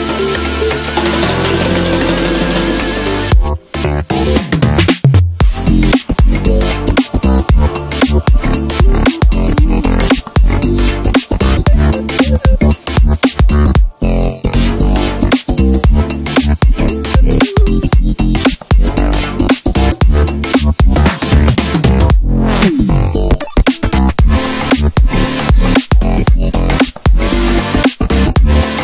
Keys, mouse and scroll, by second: 1.9-3.0 middle drag, 3.0 click, 3.9-5.0 middle drag, 5.0 KP_1, 6.7 e, 9.0 s, 11.5 e, 13.6 s, 16.3-16.7 ctrl+KP_8, 17.0 ctrl+KP_8, 18.8 e, 21.1 s, 25.9-28.8 middle drag.